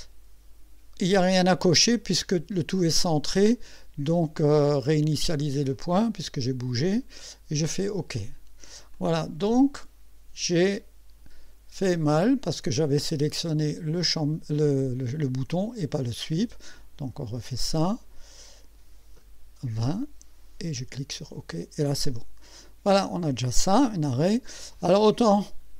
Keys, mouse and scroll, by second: 5.8 click, 7.7 click, 9.0-10.1 drag, 12.1 click, 15.6 click, 16.8 click, 18.4 click, 19.7 KP_2, 19.9 KP_0, 21.2 click, 22.0-23.5 drag.